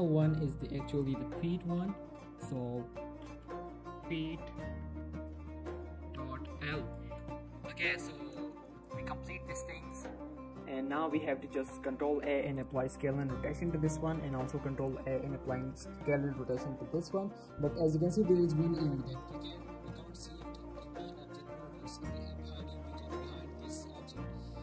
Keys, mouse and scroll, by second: 0.4 middle click, 0.9 middle click, 1.7 click, 3.0-6.7 typing, 7.2 Return, 8.5 shift+middle click, 9.4 scroll down 1, 9.6 shift+middle click, 9.9 Tab, 11.3 middle click, 11.6 z, 12.1 ctrl+a, 12.6 click, 14.2 ctrl+a, 14.8 click, 15.8 z, 16.5 click, 16.9 z, 17.3 shift+middle click, 17.7 g, 18.0 right click, 18.2 middle click, 18.6 g, 18.8 right click, 19.0 middle click, 19.9 right click, 20.5 right click, 20.8 z, 21.3 z, 21.6 middle click, 21.8 g, 22.1 right click.